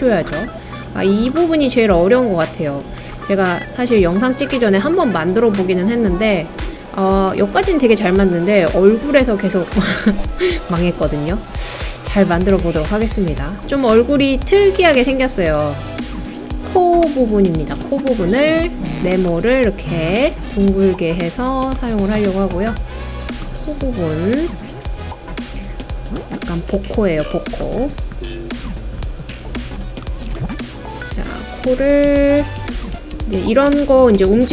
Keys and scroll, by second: 32.0 Page_Up, 32.2 Page_Up, 32.4 Up, 32.6 Up, 32.7 Up, 32.9 Up, 33.7 Home.